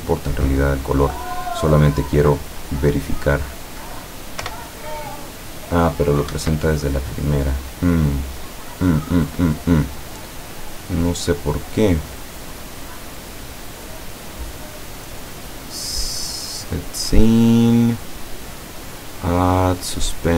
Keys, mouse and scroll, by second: 2.6 click, 3.2 click, 4.5 p, 6.4 Escape, 8.8-9.6 middle drag, 10.2 scroll down 1, 10.8-11.2 scroll up 1, 11.8-13.8 middle drag, 15.3 click, 16.2 click.